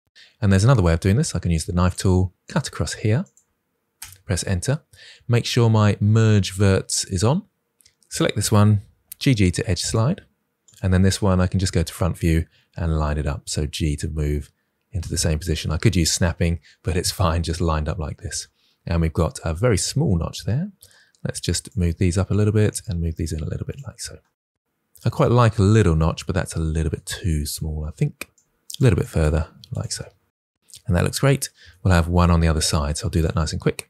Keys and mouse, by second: 0.1 l, 0.1 k, 1.7 click, 2.3 click, 3.1 click, 3.8 Return, 8.9 g, 9.0 g, 11.4 KP_1, 12.8 g, 15.3 click, 21.7 g, 22.2 click, 22.5 click, 22.7 g, 23.5 click, 24.9 Tab, 27.1 Tab, 28.4 g, 28.7 click, 28.9 click, 29.0 g, 29.4 click, 29.4 Tab, 33.2 Tab.